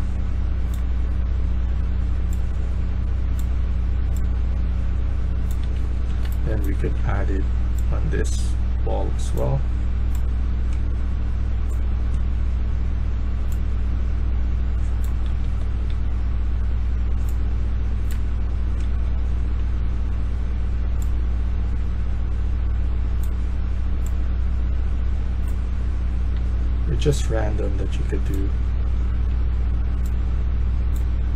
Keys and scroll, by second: 5.3-7.8 typing, 14.9-16.3 typing, 18.0-19.5 typing, 26.2 d, 26.8 d, 28.3 q, 28.7 q, 29.0 q.